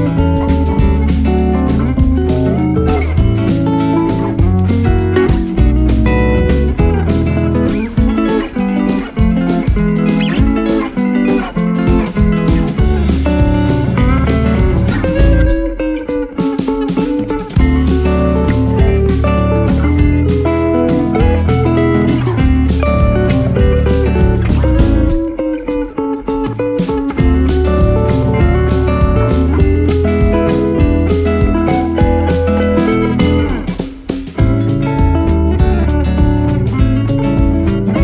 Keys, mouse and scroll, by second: 0.1 space, 2.2 space, 3.4 double click, 3.9 space, 5.5 space, 6.9 ctrl+z, 7.7 ctrl+z, 7.7 alt+scroll down 1, 7.9 space, 8.2 alt+scroll up 8, 10.4 space, 10.9 ctrl+Return, 19.0 alt+scroll up 1, 19.3 alt+right click, 25.2 alt+right click, 37.0 alt+click.